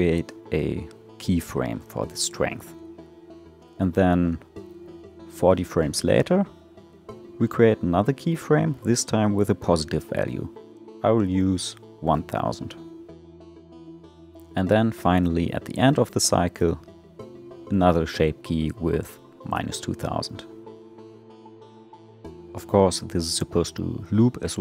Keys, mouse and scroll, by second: 4.0-7.9 drag, 7.9 0, 8.1 0, 14.4-18.9 drag, 18.9 0, 19.0 0.